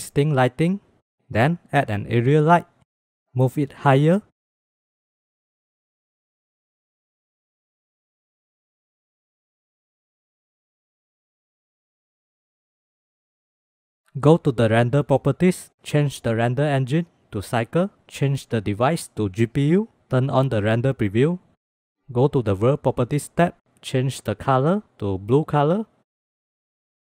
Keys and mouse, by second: 0.4 shift+click, 1.4 shift+a, 4.4-5.6 drag, 6.4 shift+click, 6.7 click, 7.2 shift+click, 7.6 click, 8.2 shift+click, 8.3-8.8 drag, 9.2 click, 9.6-9.9 drag, 11.2-14.0 drag, 16.5-17.4 drag, 18.2-19.1 drag, 23.3 click, 24.2 click.